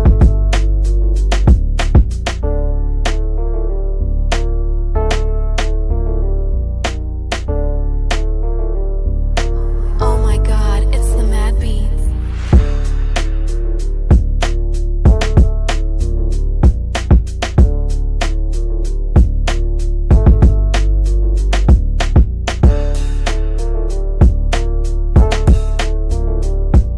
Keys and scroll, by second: 6.1 F4, 15.8 ctrl+Page_Down, 17.7 g.